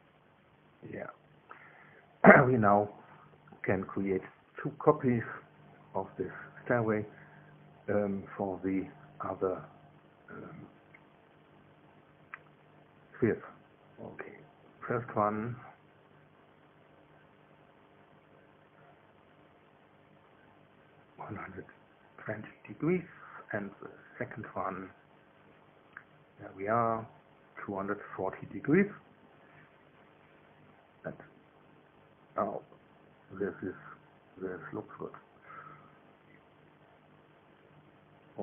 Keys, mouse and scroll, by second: 1.1 click, 3.3 click, 10.3 click, 11.0 click, 12.0 click, 15.5 ctrl+c, 16.6 ctrl+v, 19.2 click, 20.3 KP_1, 20.5 KP_2, 20.7 KP_0, 21.4 KP_Enter, 24.0 ctrl+v, 25.3 click, 26.1 click, 27.3 click, 28.9 Delete, 29.4 KP_2, 29.6 KP_4, 29.8 KP_0, 30.4 KP_Enter, 31.5 click, 31.9-34.3 middle drag, 34.5-35.6 middle drag, 36.2 middle click.